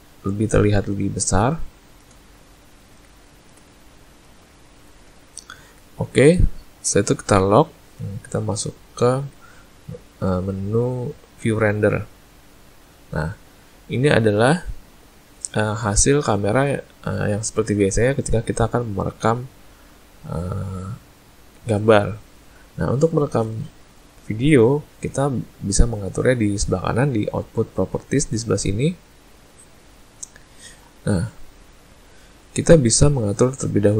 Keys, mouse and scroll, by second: 0.5 ctrl+middle click, 1.8 shift+middle click, 2.3 ctrl+middle click, 3.2 shift+middle click, 3.8 ctrl+middle click, 7.5 click, 9.2 z, 29.1 click.